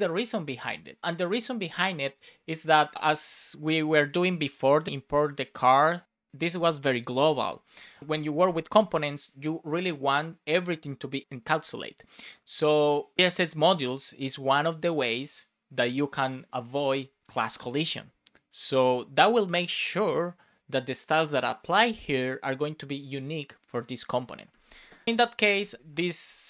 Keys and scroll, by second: 25.0 super+Left, 25.3 Right.